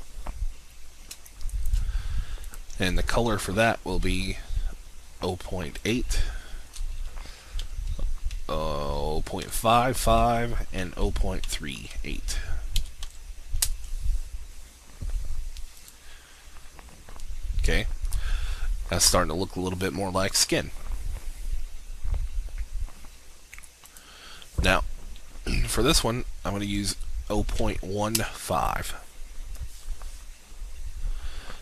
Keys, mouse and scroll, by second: 1.3 alt+shift+click, 2.5 click, 7.6 0, 8.3 5, 9.5 5, 10.2 Tab, 10.7 0, 11.4 3, 11.7 7, 12.8 BackSpace, 13.1 8, 13.7 Return, 15.7-16.9 drag, 25.8 0, 26.8 1, 27.7 5, 28.1 Return.